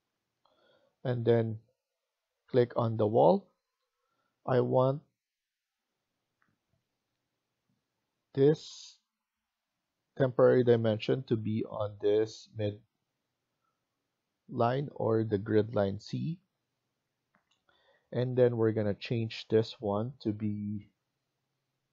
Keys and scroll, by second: 0.1 Escape.